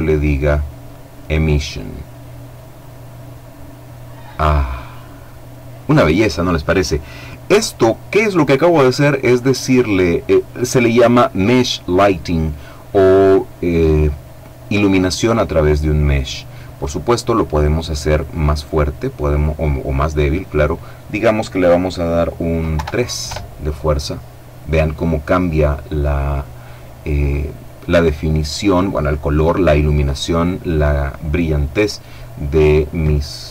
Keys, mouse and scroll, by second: 1.1 click, 17.6 click, 18.8 click, 22.2 KP_3, 22.8 KP_Enter.